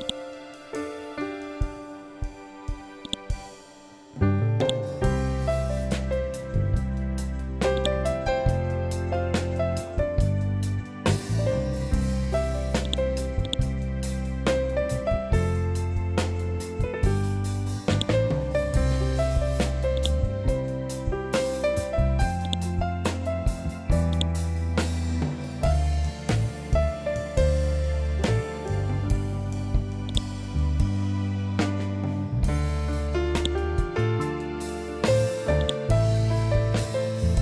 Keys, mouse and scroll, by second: 1.1-2.5 scroll down 1, 2.5-5.9 drag, 5.9 scroll up 1, 7.2 scroll up 1, 7.2-14.1 drag, 14.1-14.7 scroll up 1, 14.9 Down, 16.4 scroll down 1, 17.4 click, 20.5 scroll up 1, 21.9-27.2 drag, 27.2-27.7 scroll down 1, 29.6-35.1 drag, 36.2 b.